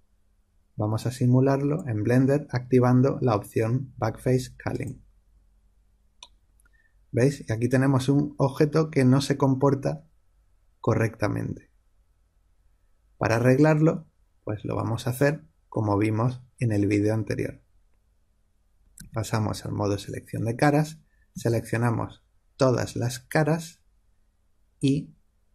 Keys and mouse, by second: 0.9 click, 4.7-6.5 drag, 6.5-9.4 middle drag, 16.3-18.9 middle drag, 18.9 3, 21.2 a.